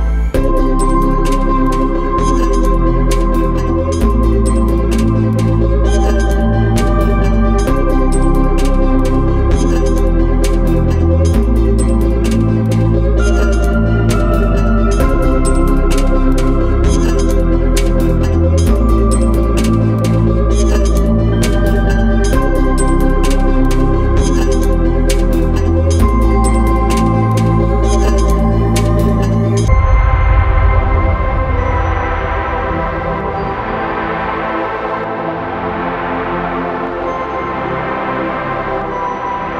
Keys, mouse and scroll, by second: 2.6 middle click, 3.0 scroll up 1, 6.8 click, 11.5 middle click, 12.3-13.4 scroll down 1, 13.4 click, 18.0 click, 19.3 scroll up 1, 19.7 middle click, 22.9 scroll down 1, 24.1-24.7 scroll up 1, 24.7 scroll down 1, 27.0 scroll up 1, 30.0 click, 31.0-32.3 scroll down 1, 32.5 Escape, 33.3 click, 36.4 scroll up 1, 36.8 ctrl+z, 38.4 middle click, 39.0-39.5 scroll down 1.